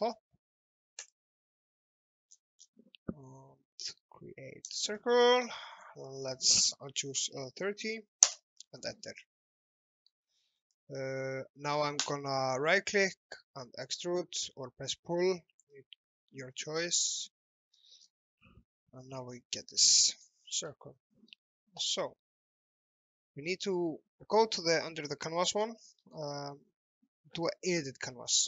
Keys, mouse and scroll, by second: 1.0 click, 2.4-2.7 scroll down 1, 4.7 click, 5.3 alt+middle click, 5.8 click, 7.1 KP_3, 8.0 KP_0, 8.2 Return, 9.4 shift+middle click, 10.6 click, 12.0 right click, 14.0 click, 17.2 alt+middle click, 18.1-18.5 scroll up 1, 18.8 shift+middle click, 19.6-20.0 scroll down 1, 20.1 alt+middle click, 20.4-20.8 scroll up 1, 20.9 shift+middle click, 21.0 shift+scroll up 2, 22.0 alt+middle click, 25.6 click, 26.0 right click.